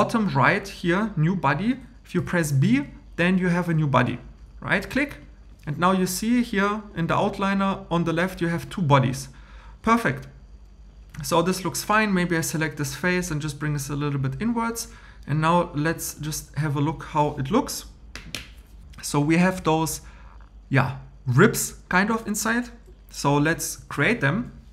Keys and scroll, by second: 2.2 b, 23.8 super+m.